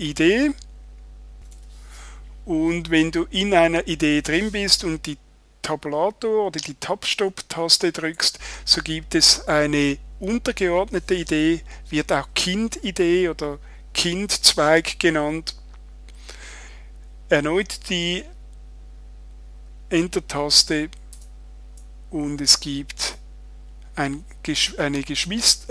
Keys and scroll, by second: 8.0 Tab, 21.1 Return.